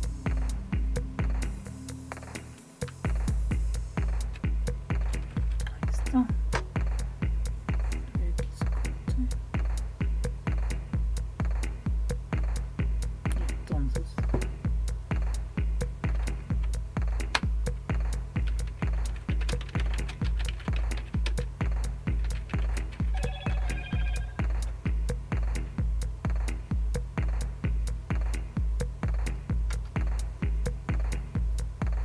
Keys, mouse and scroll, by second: 2.9 Down, 3.3 Down, 3.4 typing, 3.5-4.3 Down, 5.0 Up, 5.2 Up, 16.1 Tab, 16.6 Tab, 17.3 Return, 19.1-24.7 typing, 29.7 Return.